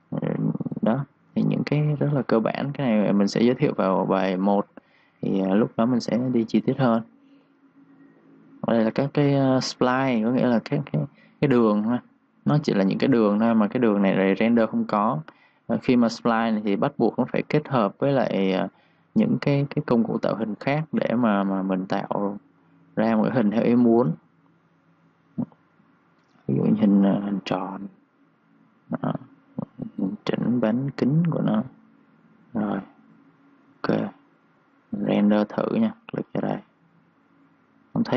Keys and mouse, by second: 1.9-5.1 typing, 2.1 click, 3.3 click, 3.8 click, 4.8 click, 5.3 click, 14.6-15.0 typing, 15.7 click, 19.3-21.1 typing, 19.4 click, 20.4 click, 22.6 click, 23.0-23.7 typing, 23.1 click, 24.7 click, 32.5-33.4 typing, 32.6 click, 33.6 click, 34.5-35.7 typing, 35.1 click, 36.6 click.